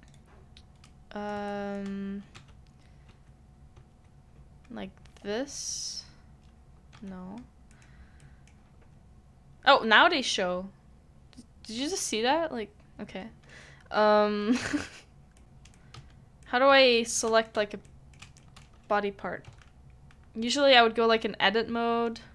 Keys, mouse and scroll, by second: 0.8 middle click, 1.5 shift+middle click, 2.3 Tab, 3.0 Tab, 3.7 Tab, 6.9 Tab, 7.7 middle click, 15.3 middle click, 15.4 right click, 15.7 middle click, 16.4 v, 16.4 middle click, 17.8 middle click, 18.4 shift+middle click, 19.4 Tab.